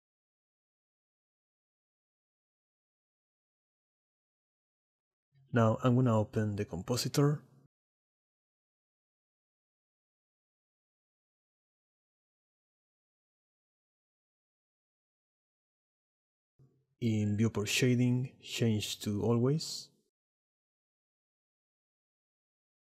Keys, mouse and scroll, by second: 0.2 middle click, 0.7 click, 1.0 KP_0, 1.7 click, 1.9 KP_0, 2.5 click, 3.3 click, 3.5 middle click, 3.9 shift+d, 4.1 click, 4.6 click, 7.2-11.0 drag, 12.7 click, 15.6 click, 17.2-21.2 drag.